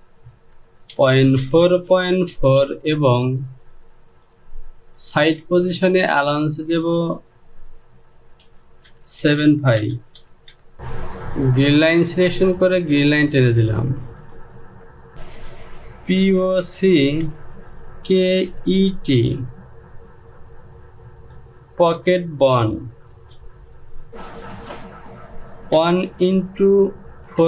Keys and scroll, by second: 0.9 Down, 1.4 KP_Decimal, 1.9 KP_4, 2.2 Down, 2.4 KP_Decimal, 2.8 KP_4, 3.1 Down, 7.1 Down, 8.9-10.7 typing, 10.0 Down, 16.5-18.4 typing, 19.6 typing, 21.8 space, 23.7-25.0 typing, 26.3-26.8 typing.